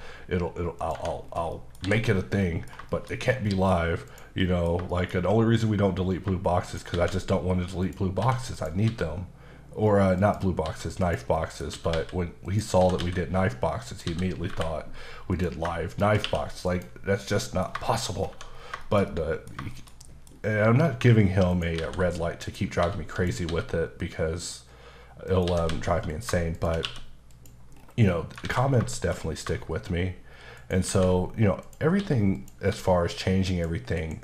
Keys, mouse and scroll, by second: 0.8 click, 0.9 Tab, 1.2-1.5 scroll down 2, 1.5 middle click, 1.8 h, 2.1 scroll down 2, 2.4 middle click, 2.9 shift+middle click, 3.2 scroll up 2, 3.4 middle click, 4.1 click, 4.4 middle click, 4.9 shift+middle click, 5.1-6.2 scroll up 2, 6.6 shift+right click, 6.9 shift+a, 7.8 click, 8.2 s, 8.5 click, 8.8 s, 10.2 click, 10.6 s, 11.0 click, 11.3 middle click, 11.7-12.8 typing, 12.4 click, 13.9 click, 14.0 s, 15.3 click, 15.9 shift+click, 16.2 q, 16.7 click, 17.2 middle click, 17.8 shift+middle click, 18.1-18.7 scroll down 4, 18.3 1, 18.8 shift+middle click, 19.7 shift+middle click, 20.3-21.0 scroll up 4, 21.5 shift+right click, 21.8 shift+a, 22.4 click, 22.8 s, 23.1 click, 23.5 s, 25.3 click, 25.4 typing, 26.1 click, 26.6 shift+click, 26.8 click, 26.8 q, 27.3 click, 27.7-28.1 scroll down 2, 28.1 middle click, 28.4 alt+a, 28.9 shift+middle click, 30.6 shift+right click, 30.9 shift+a, 31.6 click, 32.0 s, 32.3 click, 32.7 s, 33.5 click, 34.0-34.2 typing.